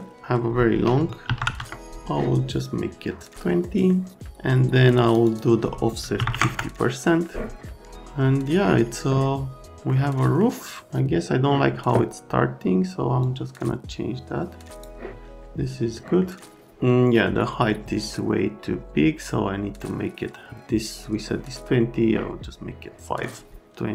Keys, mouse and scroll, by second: 1.2 KP_2, 1.4 KP_0, 1.7 KP_Enter, 6.2 KP_5, 6.3 KP_0, 6.4 KP_Enter, 9.9 middle click, 13.2 click, 15.9 middle click.